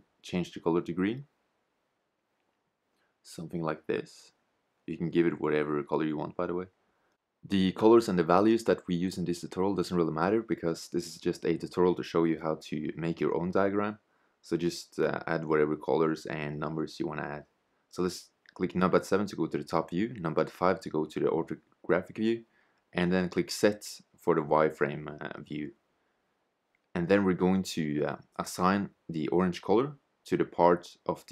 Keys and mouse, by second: 7.4-14.1 drag, 17.0 KP_7, 18.4 KP_5, 19.9 z, 20.9 Tab, 28.4 click.